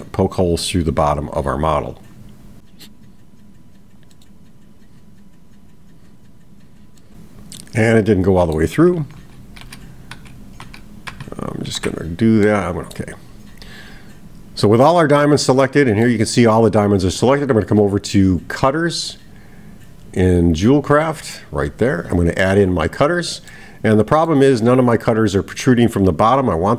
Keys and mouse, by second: 7.0-8.6 middle drag, 12.5-13.0 middle drag, 15.0-16.1 middle drag, 22.9 click, 23.5-24.4 middle drag.